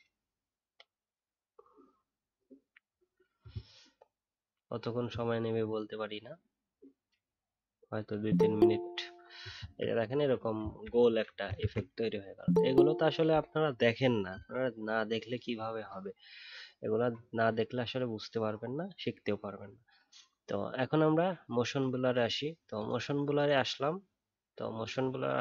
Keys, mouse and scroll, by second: 10.8 alt+scroll down 1, 11.2 alt+scroll up 1, 11.6 ctrl+z.